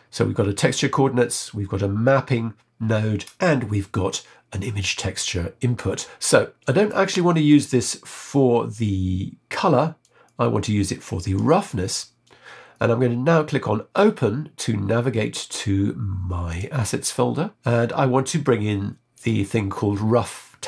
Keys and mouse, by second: 6.3 middle click, 10.0-11.5 drag, 16.5 click.